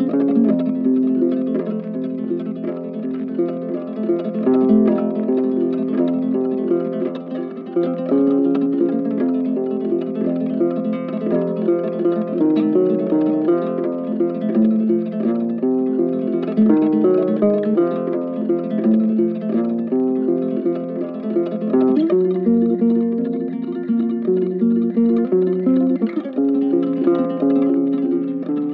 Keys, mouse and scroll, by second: 5.1 ctrl+z.